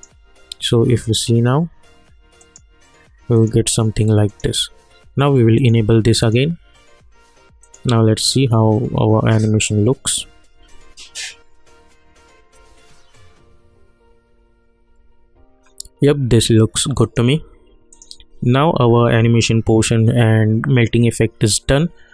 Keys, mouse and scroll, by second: 17.0 click.